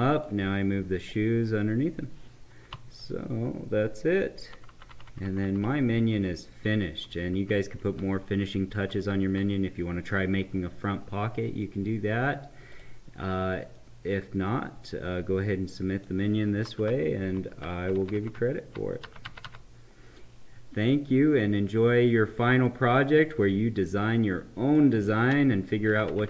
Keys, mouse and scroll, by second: 0.1-2.7 drag, 2.7 Up, 12.8 click, 13.7-16.7 right drag, 16.7 Up, 17.9 Left, 22.6-25.9 right drag, 25.9 Left, 26.1 Left.